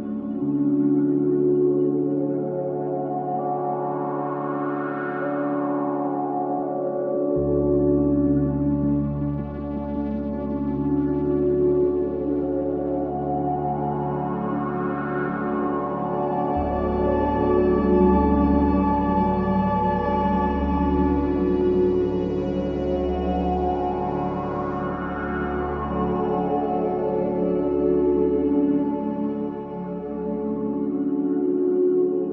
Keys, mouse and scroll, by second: 0.3-1.9 middle drag, 2.1 scroll up 1, 2.4-3.5 middle drag, 3.5 drag, 3.9 click, 5.3 l, 6.1 click, 7.5-9.9 middle drag, 9.9 click, 10.7 drag, 12.2 middle click, 13.1 click, 13.9-14.6 middle drag, 15.9 click, 17.7 click, 20.4 click, 21.2 middle click, 23.4-23.9 scroll up 2, 23.9 drag, 25.6-27.4 middle drag, 27.4-27.8 scroll up 1, 27.8-28.3 middle drag, 28.3 scroll down 2, 28.6-30.1 middle drag, 30.6 p, 31.7-32.3 middle drag.